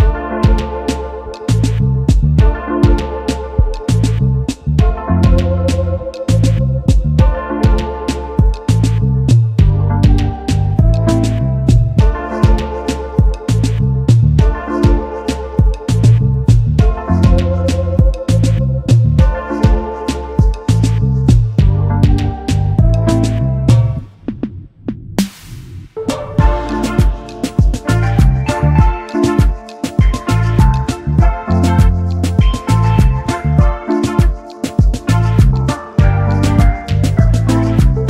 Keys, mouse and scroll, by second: 0.5 alt+scroll down 1, 1.4 alt+scroll up 1, 3.2-3.6 alt+scroll up 1, 4.9 double click, 6.5-7.0 alt+scroll down 1, 8.9 shift+click, 14.2 double click, 16.6 scroll down 1, 17.2-17.6 scroll up 1, 17.6 scroll down 1, 17.8-18.3 scroll up 1, 18.3-21.4 scroll down 1, 30.9-31.6 alt+scroll down 1, 32.5 double click, 33.4 alt+scroll up 1, 33.4 alt+scroll down 1, 33.5 alt+scroll up 1, 34.0 alt+scroll down 1, 34.1-34.7 alt+scroll up 1, 36.6 alt+click.